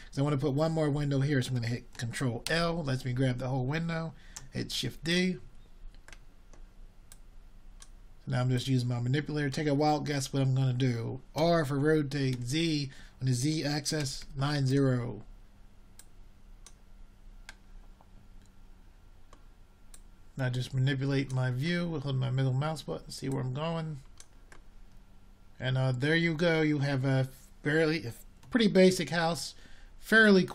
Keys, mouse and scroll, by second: 6.5 shift+d, 7.7-9.5 drag, 12.2-12.6 drag, 18.0 ctrl+l, 20.4 shift+d, 27.2 r.